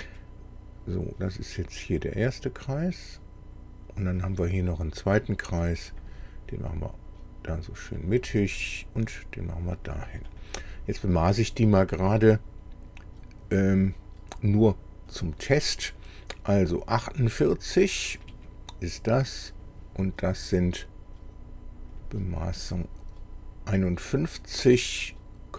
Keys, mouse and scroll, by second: 1.8-4.2 drag, 5.9 click, 7.9 click, 9.8 click, 10.3 click, 11.4 click, 15.1 click, 18.3 Escape, 19.6 click, 22.0 click.